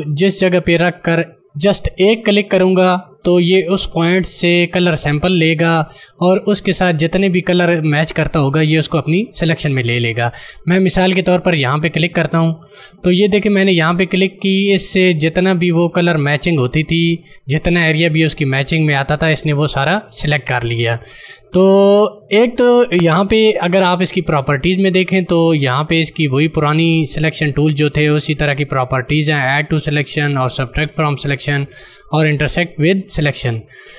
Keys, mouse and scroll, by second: 12.2 click, 23.1 ctrl+d.